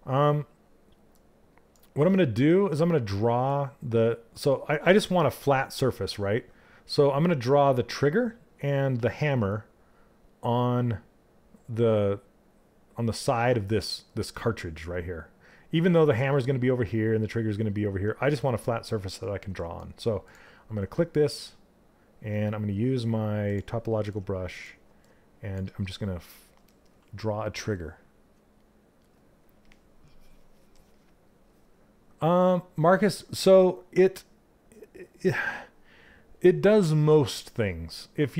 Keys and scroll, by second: 23.5 s.